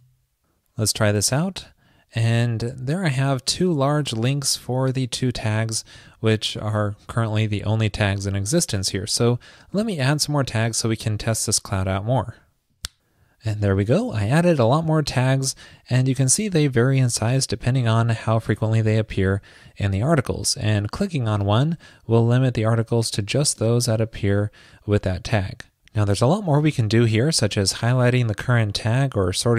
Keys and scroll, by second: 0.0 super+s.